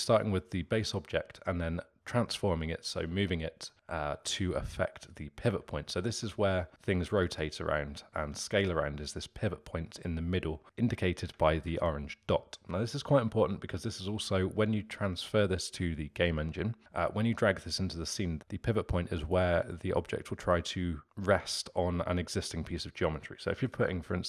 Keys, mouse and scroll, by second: 3.7-6.6 middle drag, 6.6 r, 8.2 s, 11.4 ctrl+z, 11.6 ctrl+z.